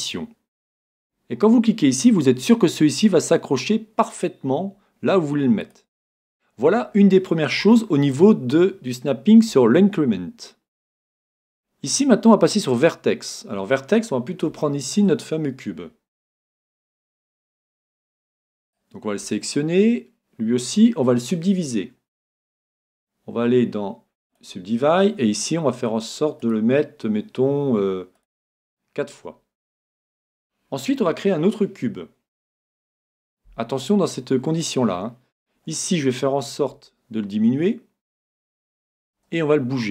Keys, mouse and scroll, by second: 0.5-2.3 drag, 2.3 g, 5.7-7.7 drag, 6.3-9.6 middle drag, 9.6-10.8 scroll down 2, 11.5-13.4 drag, 13.4-14.5 scroll down 3, 14.5-16.9 middle drag, 17.5-18.3 scroll up 1, 18.3 Tab, 18.3-19.5 middle drag, 18.6 right click, 19.3 Tab, 24.3-29.9 drag, 29.1-32.2 middle drag, 35.3-37.4 middle drag, 36.7 s, 38.2-39.9 drag, 39.2 g.